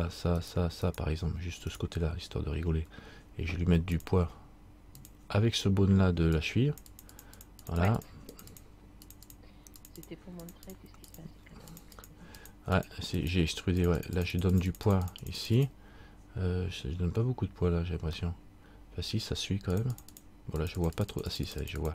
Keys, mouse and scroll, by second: 4.1 click, 6.6 click, 7.5 click, 7.6-18.3 click, 18.4 middle click, 19.9-21.8 click.